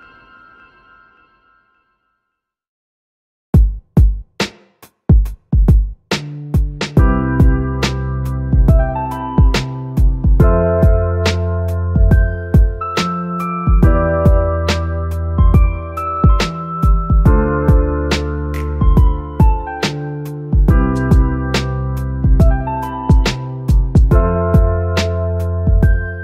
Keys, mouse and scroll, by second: 0.5 click, 2.8-3.4 scroll down 4, 3.4-5.2 middle drag, 5.2 click, 8.8 shift+d, 10.5 click, 12.7 r, 15.5-18.0 drag, 21.5 click.